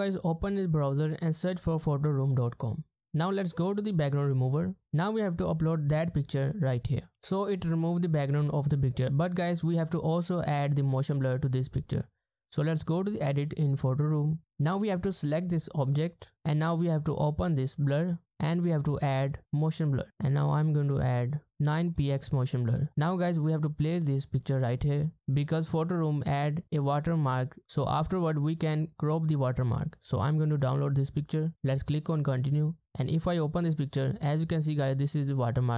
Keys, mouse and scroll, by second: 2.6 Return, 4.8 double click, 6.4-7.2 scroll down 1.